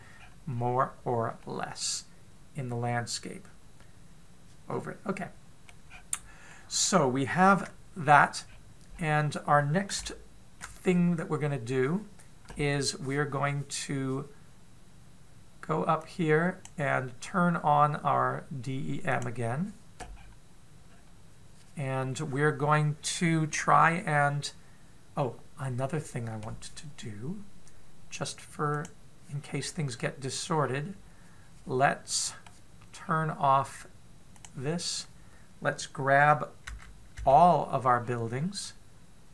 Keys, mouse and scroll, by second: 0.6-2.2 scroll down 7, 2.2 middle click, 6.7-7.3 scroll down 7, 7.3 middle click, 8.3 KP_7, 8.9-10.2 scroll down 3, 9.7-10.3 scroll up 5, 10.8 shift+middle click, 16.8 click, 20.0 click, 20.9-21.7 scroll down 4, 21.7-23.1 scroll down 1, 25.9-29.2 scroll down 1, 29.2 scroll down 2, 29.6 click, 30.4-31.4 scroll up 6, 31.4-32.6 scroll down 2, 32.6 middle click, 32.6 scroll down 1, 33.8 scroll down 1, 35.3 click, 37.5 a, 38.0 a, 38.8-39.3 scroll up 3.